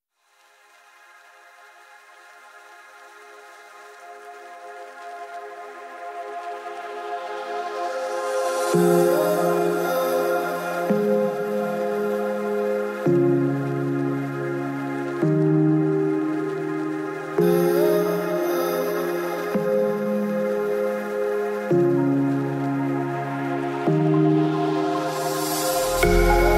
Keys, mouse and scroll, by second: 0.8 click, 1.3 click, 1.6 click, 1.9 click, 2.0 ctrl+middle click, 2.1 middle click, 2.3 click, 3.8 click, 4.7 click, 5.4 click, 5.8 click, 6.6 middle click, 7.1 middle click, 7.3 click, 7.9 click, 8.0 click, 8.7 click, 9.0 click, 9.3 click, 9.7 click, 10.1 click, 10.8 click, 12.1 shift+middle click, 12.9 middle click, 15.2 shift+click, 16.1 click, 16.4 click, 17.8 KP_Decimal, 19.4 click, 20.4 shift+middle click, 20.7 shift+s, 20.8 click, 21.6 click, 21.6 s, 21.7 alt+d, 21.9 shift+middle click, 22.2 middle click, 22.4 shift+s, 22.6 click, 23.8 click, 24.4 click, 25.5 click.